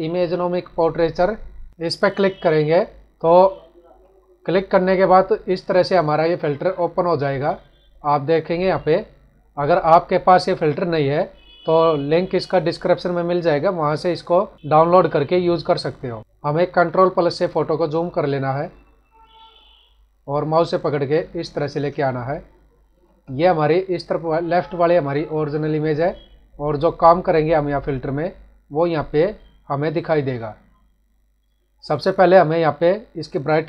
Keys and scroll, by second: 16.4 ctrl+=, 18.6 space.